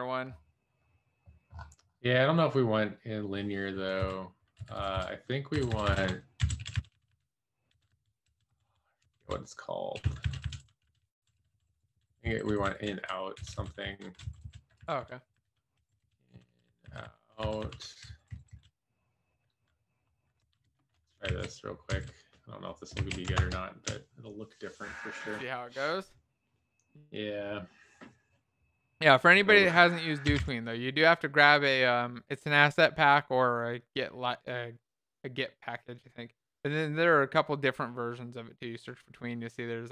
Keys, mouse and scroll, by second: 4.9 Up, 5.5 Up, 11.2 Up, 11.5 Up, 15.9 Down, 16.2 Up.